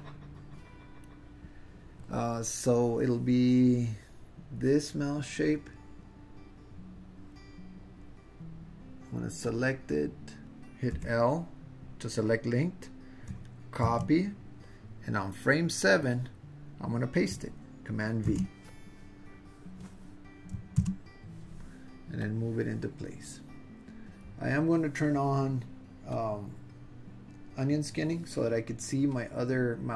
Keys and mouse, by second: 9.4-10.4 drag, 10.9 l, 13.8 super+c, 16.0 click, 18.2 super+v, 20.8 super+v, 22.3-24.2 drag, 26.1 click, 29.2-29.9 drag.